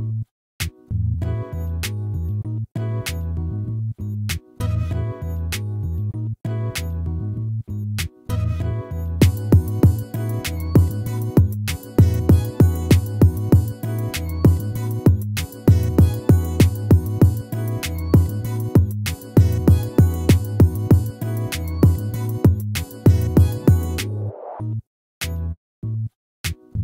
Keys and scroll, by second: 8.7 ctrl+-, 11.3 ctrl++, 23.8 ctrl+-.